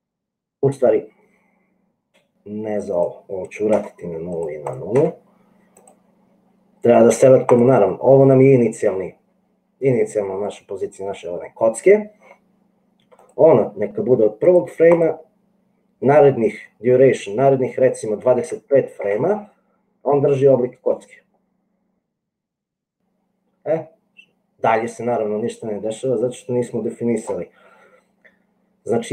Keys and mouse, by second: 3.3-4.5 drag, 4.7-6.4 drag, 13.3-14.8 drag, 14.9-19.4 drag, 21.6 click, 27.0 click.